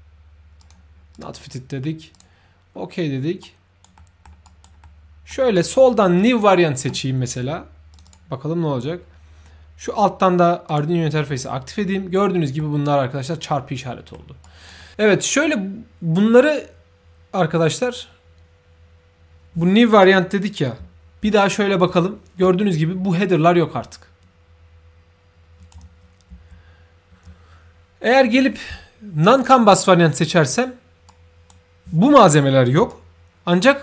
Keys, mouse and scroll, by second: 0.6 ctrl+click, 1.1 ctrl+click, 2.1 ctrl+click, 3.4 ctrl+right click, 4.1 ctrl+middle click, 4.4 ctrl+right drag, 5.0 ctrl+middle click, 5.5 ctrl+right click, 6.2 ctrl+click, 7.9 ctrl+click, 10.7 ctrl+click, 12.2 ctrl+middle click, 13.5 ctrl+middle click, 14.4 ctrl+right click, 20.0-20.5 ctrl+right drag, 21.2 ctrl+f, 22.4-25.7 shift+right drag, 22.4 shift+f, 26.3 ctrl+f, 29.2 click, 29.2 f, 31.1-31.5 right drag, 32.9-33.8 shift+right drag.